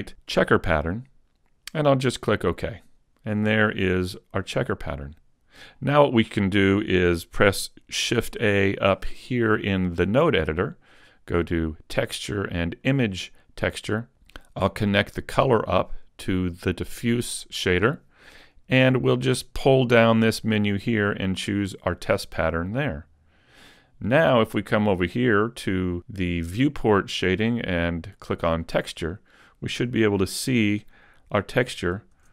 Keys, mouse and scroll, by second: 22.5 click, 25.9 click, 31.5 a, 32.2 Tab.